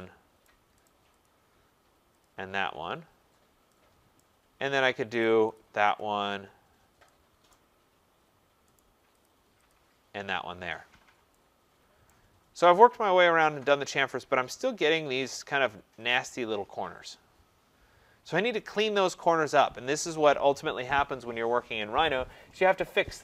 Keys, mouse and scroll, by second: 0.4 right click, 0.9 right click, 1.3 click, 2.2 click, 2.7 middle click, 2.8 middle click, 3.3 middle click, 3.4 middle click, 4.2 right click, 4.6 middle click, 4.6 middle click, 4.7 middle click, 5.2 right click, 5.5 click, 6.0 click, 7.5 right click, 7.7 middle click, 7.8 middle click, 8.2 middle click, 8.2 middle click, 8.8 right click, 9.3 click, 9.7 click, 10.9 middle click, 12.1 right click, 12.3 middle click, 12.4 middle click, 14.0 middle click, 14.1 middle click, 14.1-14.7 scroll, 15.1 scroll.